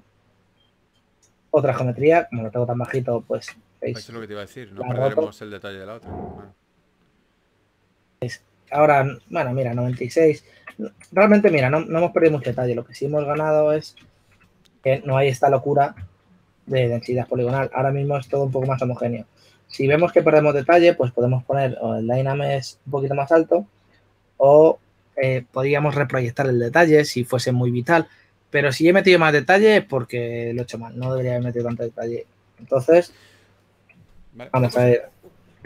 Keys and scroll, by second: 2.5 shift+f, 4.3 shift+f, 9.3-9.9 typing, 10.6 super+z, 11.2 shift+super+z, 12.3 f, 14.2 shift+super+z, 16.4 shift+super+z, 17.6 s, 18.6 super+z, 21.6 s, 31.3 shift+f, 34.5 shift+f.